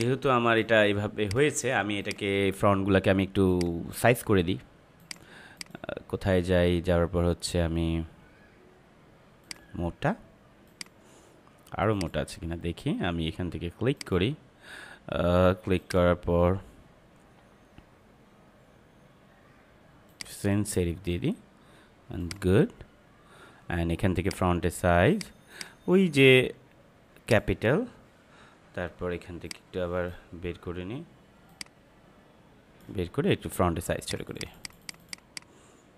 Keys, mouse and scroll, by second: 9.4 click, 20.0-35.9 drag.